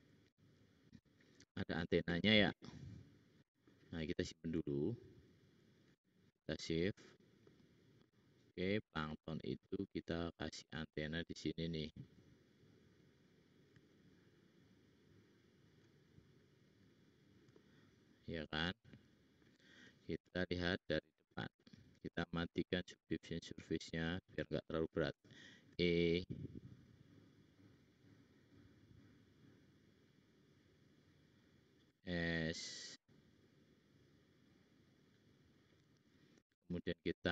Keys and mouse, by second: 13.2-15.7 drag, 15.9 shift+click, 17.8-18.8 middle drag, 20.0 `, 25.2 e, 32.1 s, 37.2 ctrl+r.